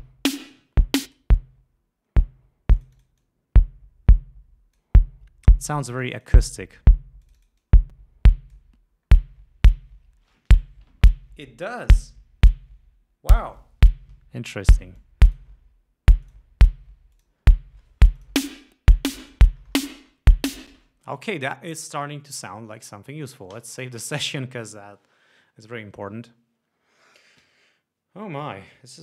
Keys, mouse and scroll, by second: 0.4 click, 1.2 click, 3.0-5.1 drag, 5.9-7.1 drag, 7.4-8.9 drag, 8.9 scroll down 2, 9.7 scroll up 2, 14.6 scroll down 2, 15.2 click, 16.4 click, 17.3 click, 18.4 click, 20.9 space, 23.7 ctrl+s.